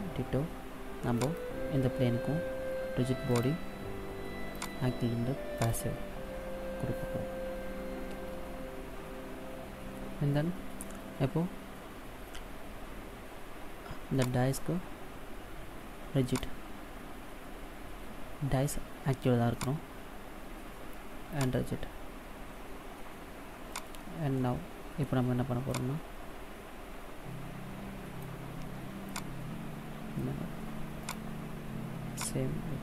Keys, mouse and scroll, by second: 1.0 right click, 3.1 click, 4.4 click, 14.1 right click, 16.1 click, 19.6 right click, 21.1 click, 23.8 right click, 24.2 middle click, 25.6 click, 28.9 click, 31.1 right click, 32.0 click.